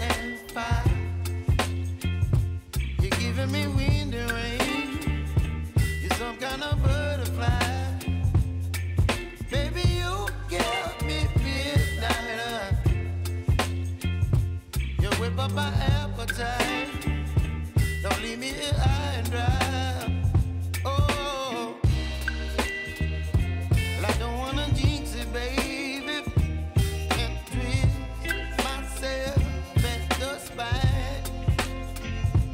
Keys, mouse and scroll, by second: 0.8 click, 1.9 space, 2.8 [, 3.8 space, 6.1 click, 8.5 space, 9.2 click, 16.8 ctrl+d, 17.5 Return, 18.0-19.3 typing, 20.6-22.1 drag, 23.1 F4, 23.7 click, 24.9 space, 26.0 click, 26.6 space, 27.4-29.3 drag, 29.3 [, 29.7 space.